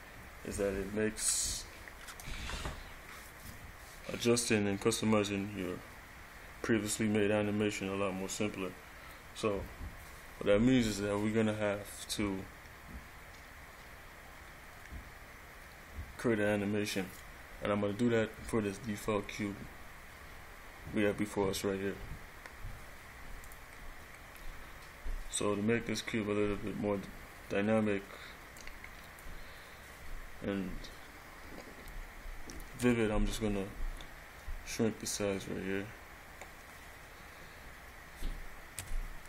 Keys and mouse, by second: 23.6 click, 28.7 click, 33.0 s.